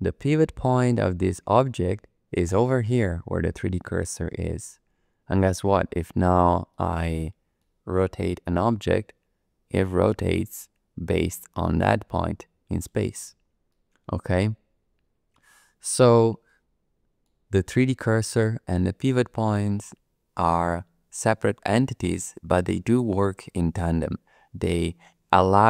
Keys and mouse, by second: 6.7 middle click, 8.4 r, 12.7 click, 13.7-15.8 middle drag, 16.5 middle click.